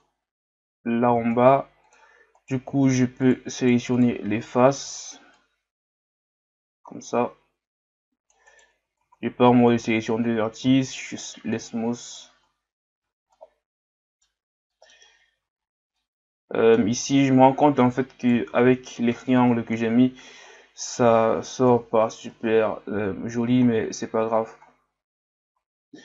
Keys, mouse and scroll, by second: 1.1 ctrl+Tab, 2.3 right click, 2.8 shift+right click, 3.2 shift+right click, 3.6 shift+right click, 4.0 shift+right click, 4.8 c, 9.0 ctrl+Tab, 10.6 w, 13.0 scroll down 4, 13.3-15.0 middle drag, 15.0 scroll up 1, 15.4 Tab, 16.0-17.7 middle drag, 17.7 right click, 18.5 ctrl+z, 19.1-21.7 middle drag, 21.7 KP_1, 22.7-23.3 scroll down 1, 23.3 Tab, 23.7 scroll down 1, 24.7-25.1 scroll down 9, 25.5 scroll up 3.